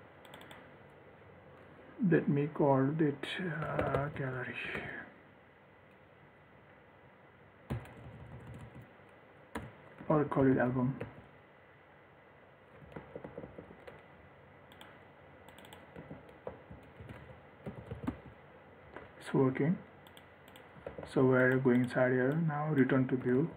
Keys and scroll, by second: 13.2 ctrl+s, 21.2 ctrl+s.